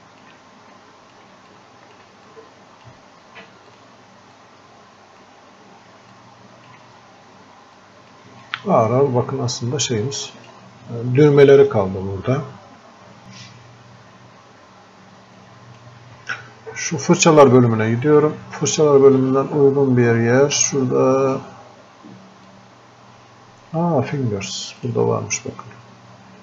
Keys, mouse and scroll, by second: 0.8 click, 1.6 alt+click, 2.3-6.2 drag, 6.2 alt+click, 7.0-7.6 scroll up 1, 7.8 alt+click, 8.5-12.8 drag, 12.8-13.2 scroll up 1, 13.2 click, 14.2 scroll up 1, 15.4-18.1 drag, 22.5-24.8 drag.